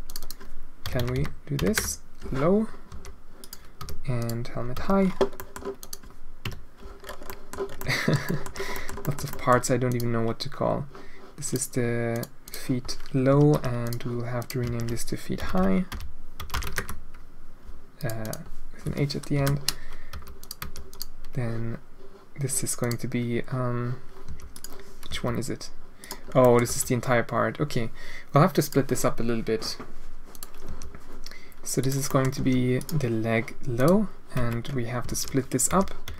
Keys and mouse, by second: 0.0-2.1 drag, 0.9 BackSpace, 1.1 BackSpace, 2.9 g, 3.7 h, 4.1 click, 4.7 h, 5.3 middle drag, 5.7 click, 6.5 KP_Decimal, 7.3 middle click, 7.4 middle click, 7.9 shift+middle click, 8.7 click, 8.7 middle click, 9.0 shift+middle click, 9.4 click, 9.8 click, 11.4 click, 12.1 click, 12.4 click, 13.4 ctrl+c, 13.8 click, 14.4-17.6 drag, 15.5 BackSpace, 17.9-19.4 drag, 20.1 h, 20.3 click, 20.6 h, 20.8 click, 22.7-24.6 drag, 25.0 g, 26.4 click, 26.6 g, 30.3 click, 30.6 g, 32.3 g, 33.7 click, 34.3 Tab, 35.1 alt+a, 35.7 l, 36.0 l.